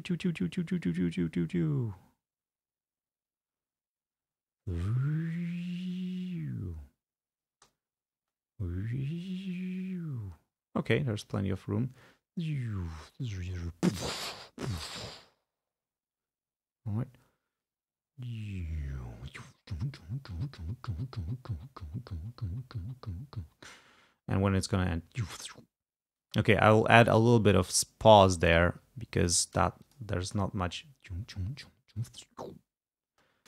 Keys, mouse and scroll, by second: 7.6 space, 26.3 space, 26.8-28.4 drag, 28.5 click, 29.1 ctrl+scroll up 2, 29.9 ctrl+click, 30.3 ctrl+space, 33.2 space.